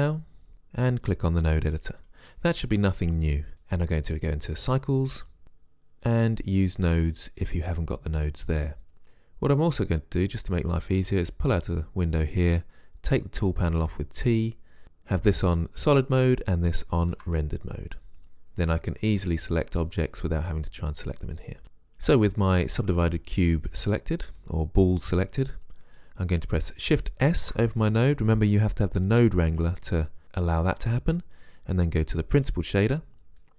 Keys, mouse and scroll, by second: 7.8-10.3 middle drag, 13.8 t, 17.3 shift+z, 19.0 right click, 27.4 shift+s, 33.4-33.5 drag.